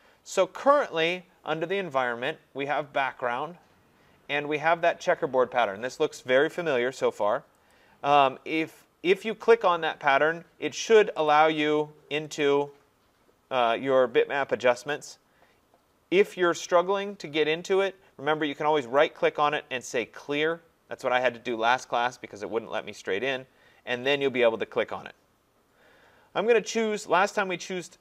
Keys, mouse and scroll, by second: 0.9 click, 7.7 click, 11.3 click, 12.4 click, 14.9 click, 19.0 right click, 23.0 click, 24.3 click.